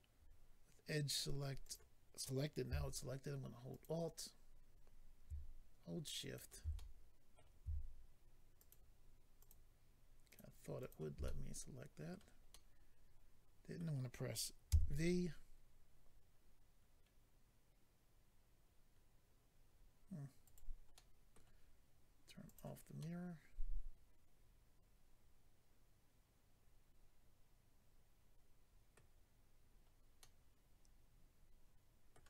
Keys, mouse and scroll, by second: 1.6 click, 1.7 click, 3.7 alt+click, 3.8 alt+click, 6.7 middle click, 8.5 alt+click, 9.4 alt+click, 10.3 alt+click, 10.8 alt+click, 10.9 alt+double click, 11.2 middle click, 12.5 middle click, 14.7 v, 20.4 right click, 20.5 right click, 20.9 middle click, 22.4 click, 29.7-30.2 scroll up 2, 30.2 middle click.